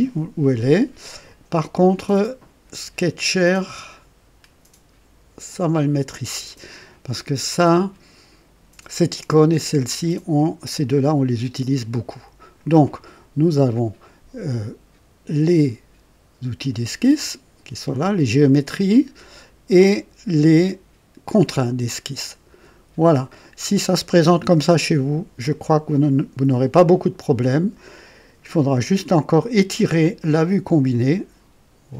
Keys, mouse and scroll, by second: 3.1-5.8 drag, 30.1-31.9 drag.